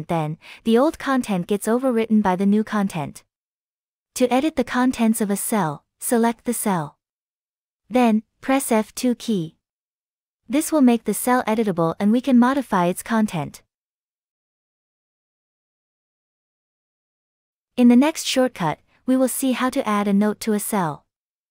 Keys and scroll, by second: 3.5 ctrl+z, 7.7 F2, 9.8 F2.